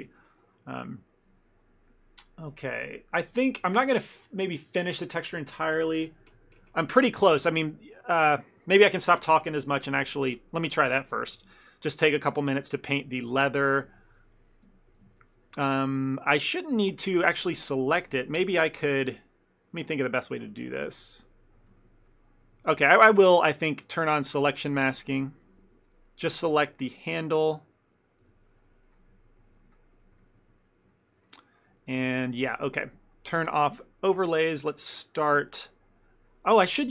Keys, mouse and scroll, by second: 0.0 ctrl+middle click, 0.4 middle click, 0.8 ctrl+middle click, 1.0 middle click, 7.2 middle click, 7.5 ctrl+middle click, 7.8 shift+middle click, 8.0 middle click, 8.4 middle click, 8.4 shift+middle click, 8.7 ctrl+middle click, 11.1 shift+middle click, 11.4 ctrl+middle click, 11.6 middle click, 12.5 ctrl+middle click, 13.2 shift+middle click, 13.4 ctrl+middle click, 14.0 Tab, 14.7 Tab, 15.2 ctrl+middle click, 15.6 middle click, 16.0 shift+middle click, 16.3 ctrl+middle click, 16.9 ctrl+middle click, 17.0 shift+middle click, 17.6 ctrl+middle click, 17.7 shift+middle click, 21.3 click, 23.3 ctrl+middle click, 24.9 click, 25.3 ctrl+middle click, 25.6 a, 25.7 a, 26.5 l, 28.3 l, 28.8 middle click, 29.0 shift+middle click, 29.8 middle click, 31.0 l, 31.5 middle click, 31.9 ctrl+middle click, 32.1 middle click, 33.9 click, 35.4 KP_1.